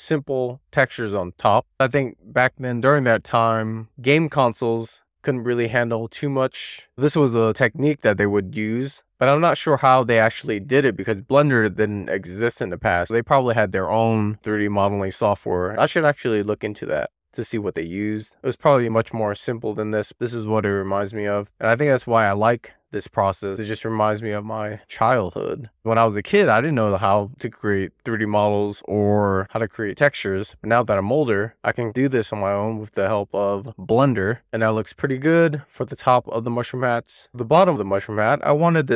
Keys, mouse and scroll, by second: 0.3 click, 1.3 shift+middle click, 2.2 click, 6.6 middle click, 7.6 click, 9.1 click, 11.1-12.9 middle drag, 13.9 scroll up 1, 14.1-15.3 scroll down 2, 15.3-15.7 scroll up 1, 15.9-16.4 scroll up 1, 17.2-18.2 middle drag, 18.8-19.6 scroll up 2, 19.6-20.8 drag, 21.2-21.8 drag, 22.7-23.7 scroll down 1, 23.7 click, 27.3-28.6 drag, 28.9-29.6 drag, 30.2 click, 32.2 middle click, 33.6-34.1 scroll down 1, 34.2 click, 35.6 click, 37.1-38.3 scroll down 2, 38.3-38.9 scroll up 1.